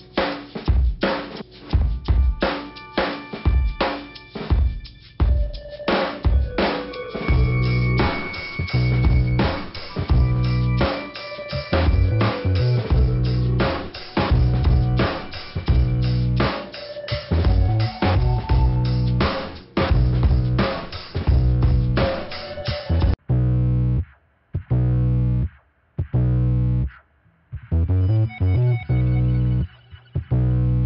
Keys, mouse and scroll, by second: 0.6 scroll up 2, 1.8 scroll down 2, 4.1 click, 4.4 click, 4.5 double click, 4.6 double click, 4.9 double click, 5.0 double click, 5.8 double click, 7.9 click, 9.8 click, 10.4 click, 10.5 click, 11.1-11.4 scroll down 2, 13.1-13.5 scroll down 2, 13.1 middle click, 14.2-14.9 scroll up 2, 14.9 click, 16.7 click, 16.7 ,, 19.2 click, 20.0 click, 21.0 click, 26.2 click, 28.7 click, 29.5 click, 30.7 click.